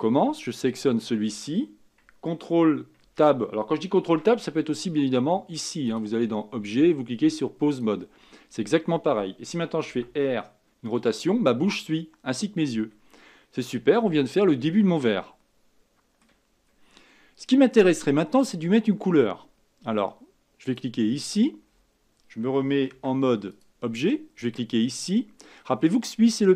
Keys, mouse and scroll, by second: 0.7 click, 3.0 ctrl+Tab, 4.0 ctrl+Tab, 5.8-8.9 drag, 9.9 r, 13.4-13.9 scroll down 2, 13.9-14.8 scroll up 4, 14.8-16.5 middle drag, 16.5-16.9 scroll down 2, 16.9-18.1 middle drag, 18.1-19.0 scroll up 2, 19.0-20.6 scroll down 2, 20.6 click, 22.9 ctrl+Tab, 23.5 click.